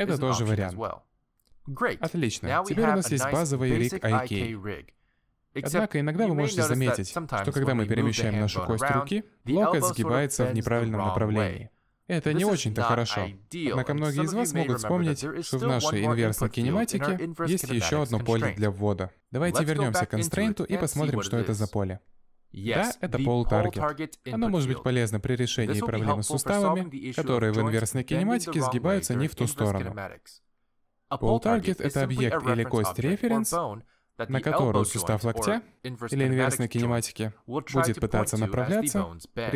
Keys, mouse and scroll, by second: 0.2-2.3 scroll down 2, 2.3 click, 2.3 scroll down 1, 2.4 g, 4.3 middle click, 5.1 alt+g, 5.6 middle click, 6.3 g, 8.4 middle click, 11.4 alt+g, 11.6 middle click, 15.2 shift+middle click, 15.5 middle click, 16.3 g, 17.3 middle click, 17.6 alt+g, 18.1 click, 18.5 middle click, 18.8 shift+middle click, 32.8 middle click, 35.1 click, 35.6 middle click, 36.0 g, 37.1 middle click, 37.4 g, 38.7 middle click.